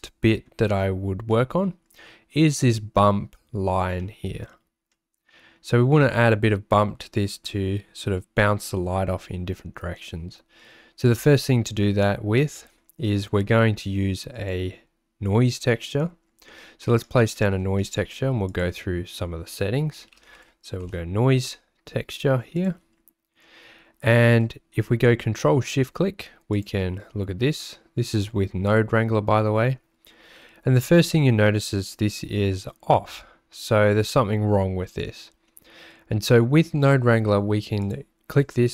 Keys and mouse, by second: 1.4 middle click, 4.1 middle click, 5.0 middle click, 11.0 click, 12.7 middle click, 13.1 middle click, 14.3 click, 16.5 middle click, 17.5 middle click, 17.9 shift+a, 37.9-38.7 drag.